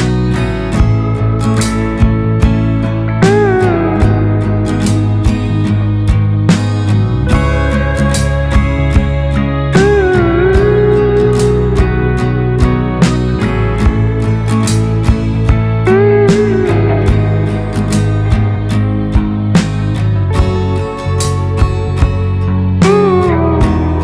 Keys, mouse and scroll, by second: 0.8 click, 2.5 click, 3.9 click, 5.1 click, 6.9 click, 8.4 click, 10.6-15.2 drag, 15.8 click, 18.9 click, 20.0-21.4 drag.